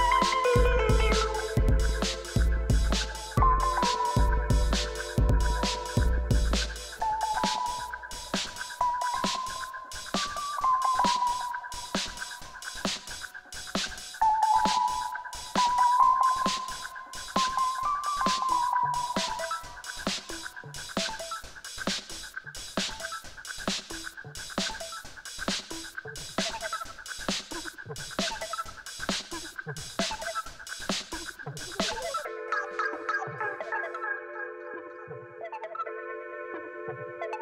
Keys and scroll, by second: 1.1 r, 1.1 y, 1.2 9, 1.3 Return, 1.6 Tab, 2.1 s, 3.1 s, 3.7 shift+z, 4.6 x, 5.8-10.6 typing, 11.9 ctrl+r, 12.1 1, 12.3 Return, 13.6 Tab, 16.6 Tab, 17.2 7, 21.4 g, 21.7 z, 28.2 alt+a, 28.6 3, 31.0 g, 31.2 z, 33.6 Tab, 34.8 g, 35.8 Escape, 36.4 7, 37.0 3.